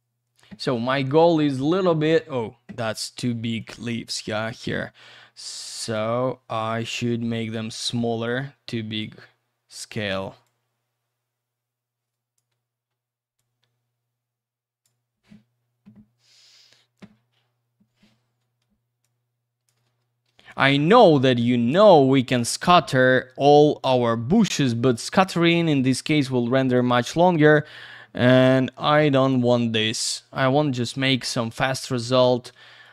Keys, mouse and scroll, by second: 1.1-2.3 scroll up 1, 3.6 click, 5.8 click, 6.7 F3, 7.5 r, 8.2 click, 10.4 click, 12.5 F3, 13.4 click, 16.2-17.2 scroll down 1, 17.2-18.4 scroll up 1, 18.4 w, 19.0 click, 21.0 click, 23.6 click, 25.3 click, 27.5 click, 30.6 w, 31.4 click, 32.8 shift+click.